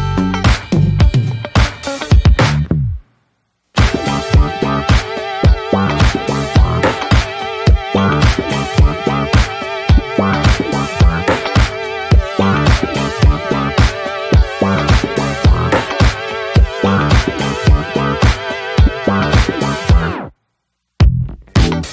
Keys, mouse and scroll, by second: 0.5-2.1 drag, 2.1-3.5 shift+middle drag, 3.5-4.8 drag, 4.8 scroll down 3, 5.0 shift+middle click, 5.1 scroll up 1, 6.9 click, 8.6 click, 8.7-11.2 shift+middle drag, 11.2 click, 11.4-12.9 shift+middle drag, 12.9 click, 13.1-14.6 shift+middle drag, 14.6 click, 14.9 ctrl+z, 16.1 click, 16.2-16.8 scroll down 3, 16.8 middle click, 17.2 scroll up 1, 17.4 middle click, 17.6 ctrl+z, 18.3 scroll up 3, 18.4 shift+middle click, 18.7 f, 21.4 click, 21.6 scroll down 2, 21.8 shift+middle click.